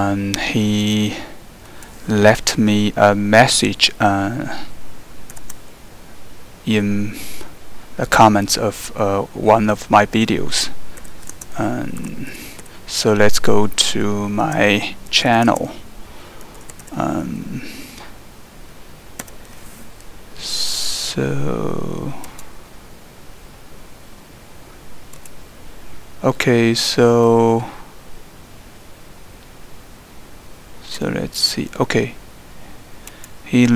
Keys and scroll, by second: 5.3 typing, 6.7 typing, 10.8-12.6 typing, 13.9 Down, 14.4-18.1 typing, 19.2 Return, 19.2 typing.